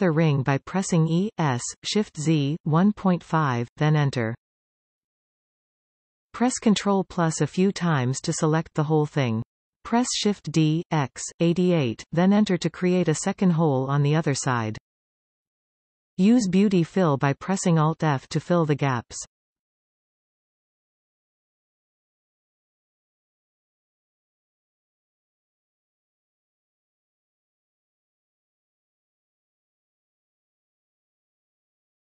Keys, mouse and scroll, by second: 1.3 e, 6.4 ctrl+KP_Add, 6.9 ctrl+KP_Add, 7.3 ctrl+KP_Add, 8.0 scroll down 1, 8.3-10.4 middle drag, 10.4 shift+d, 16.2 alt+a, 17.2 alt+shift+click, 17.7-18.1 scroll up 4, 19.6 alt+shift+click, 19.9 scroll down 4, 21.7 alt+f, 22.5-24.5 middle drag, 24.5 alt+a, 24.8-25.8 scroll up 4, 25.8-27.0 alt+shift+drag, 27.6 scroll down 3, 29.1 alt+f, 29.4-29.8 scroll down 3, 29.8-30.8 middle drag, 30.8 scroll up 2, 31.7 alt+a.